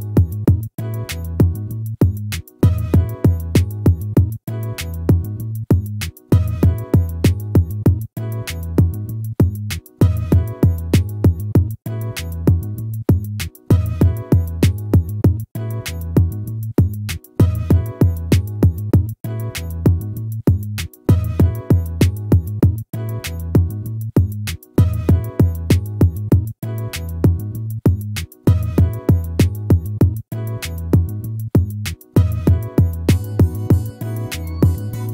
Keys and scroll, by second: 1.4 ctrl+-, 4.8 ctrl++, 8.8 ctrl+-, 20.5 ctrl++, 22.1 ctrl+-, 25.0 ctrl++.